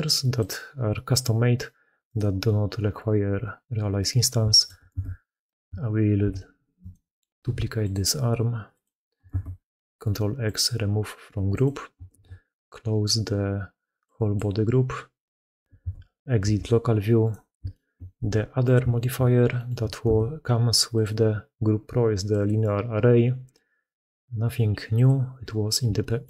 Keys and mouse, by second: 4.4-5.4 ctrl+shift+middle drag, 4.7 ctrl+x, 6.1 shift+d, 7.3 g, 9.1 ctrl+x, 11.0 g, 11.9 ctrl+x, 15.6 alt+a, 17.5 shift+middle drag, 18.0 g, 18.8 shift+middle drag, 19.4 middle click, 19.9 ctrl+x.